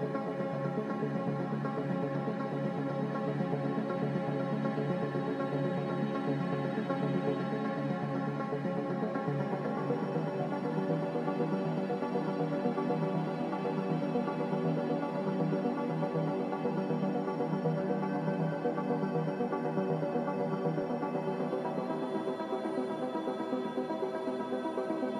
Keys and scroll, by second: 8.4 z, 15.3-17.1 typing, 18.6-20.6 typing, 21.9-22.7 typing.